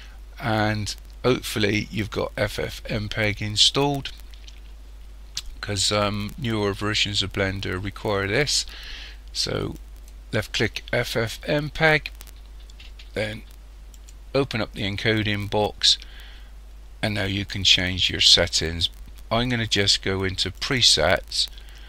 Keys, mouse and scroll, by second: 14.0 click, 20.6 click.